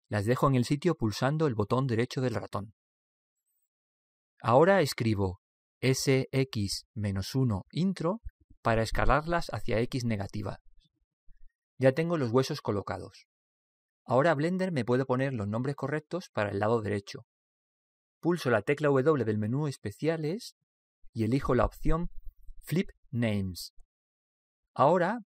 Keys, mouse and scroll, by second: 3.7-5.5 middle drag, 6.3 s, 9.2-11.2 middle drag, 19.1 w.